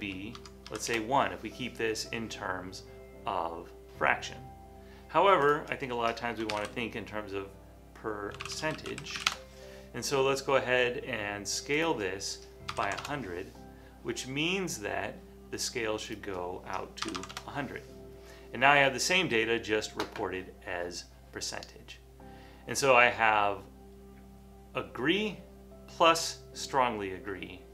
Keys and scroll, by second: 0.4 Tab, 0.7 1, 0.9 Return, 6.3-7.1 typing, 8.3-10.2 typing, 12.8 typing, 17.2 typing.